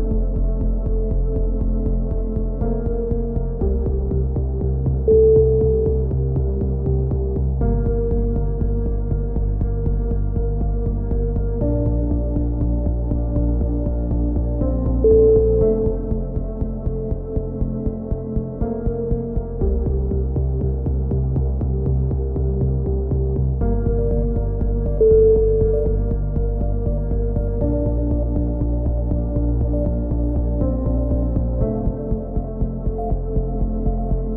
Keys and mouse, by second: 0.7 right click, 1.4 middle click, 2.0-3.3 drag, 2.5 a, 3.3 middle click, 5.4 middle click, 5.6 click, 5.6 right click, 6.4-7.8 middle drag, 8.0 ctrl+r, 10.5 a, 11.0-12.1 right drag, 12.8 a, 13.1 middle click, 13.8-15.2 right drag, 14.4 click, 15.4 a, 16.6-17.9 middle drag, 17.9 k, 21.2 a, 21.9 k, 24.4-25.4 drag, 24.9 right click, 25.5 x, 26.9-28.4 right drag, 27.7 click, 29.9-30.9 middle drag, 32.3 right click, 33.6 middle click.